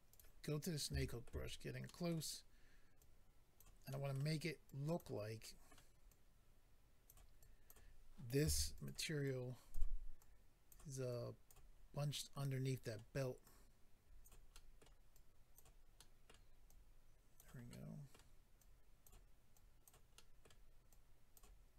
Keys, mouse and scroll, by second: 0.1 click, 0.2 click, 0.5 scroll up 2, 0.9 shift+middle click, 1.4 scroll up 1, 1.8 middle click, 3.0 click, 3.9 middle click, 4.7 click, 5.4 middle click, 6.1 click, 7.4 click, 8.4 f, 8.7 click, 8.9 click, 9.2 click, 10.2 click, 11.1 click, 11.8-12.5 scroll down 2, 12.1 middle click, 14.2 click, 14.5 middle click, 15.1 click, 15.9 middle click, 16.7 click, 17.7 middle click, 18.6 click, 19.5 click, 20.1 middle click, 20.9 click.